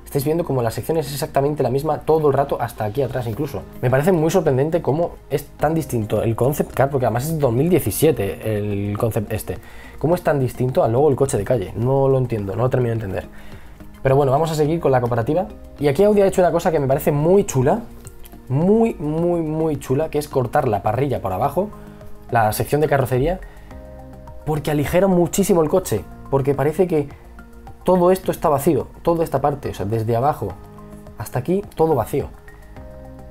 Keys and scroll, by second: 3.7 e, 4.1 b, 15.6 b, 23.2 ctrl+z.